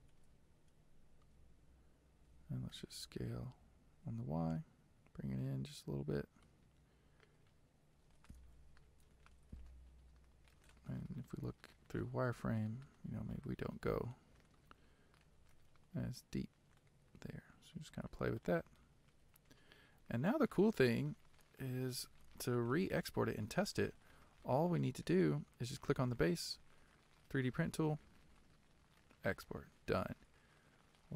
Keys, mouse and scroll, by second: 0.0-2.9 shift+middle drag, 2.9 s, 12.4-13.4 scroll up 2, 13.4-15.4 shift+middle drag, 15.4 g, 19.3 Tab, 20.0-21.5 scroll down 1, 21.5-22.0 scroll down 1, 22.0 z, 22.7 middle click, 23.7-24.5 scroll down 1, 24.5-25.9 middle drag, 25.9 click.